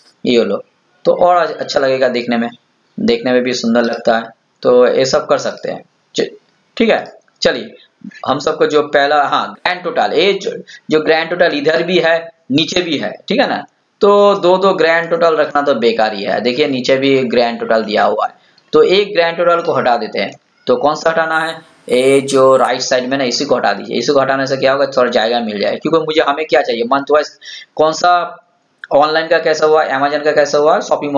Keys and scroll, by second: 15.6 ctrl+Down.